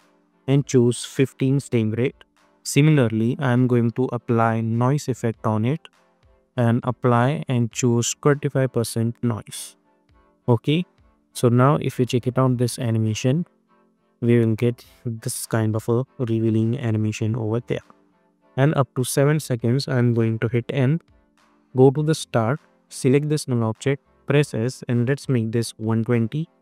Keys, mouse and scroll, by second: 1.6 Return, 3.1 click, 3.4 ctrl+a, 3.9-5.1 typing, 6.4 click, 9.4 Return, 10.5 click, 11.1 space, 15.3 -, 17.9 space, 19.4 click, 20.5 n, 21.5-23.0 drag, 24.0 s, 24.9 click, 26.0 Return.